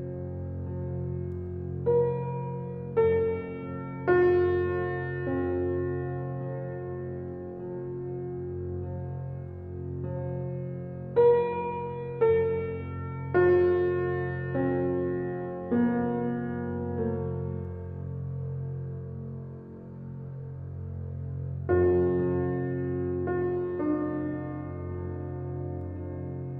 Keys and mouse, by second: 0.0 ctrl+b, 0.0 ctrl+z, 0.0 Tab, 0.0-0.4 drag, 1.3 click, 2.1 click, 3.1-3.5 drag, 7.6 drag, 13.0-13.4 drag, 14.7 click, 15.1 click, 16.3-17.0 drag, 19.7 Tab, 21.0 click, 22.0 ctrl+r.